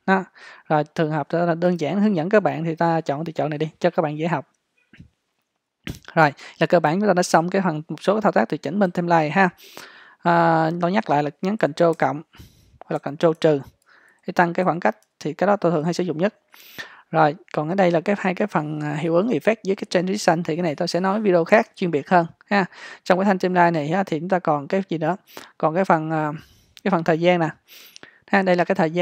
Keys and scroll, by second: 12.0 super+=, 13.0 super+-, 14.1 super+=, 14.7 super+-.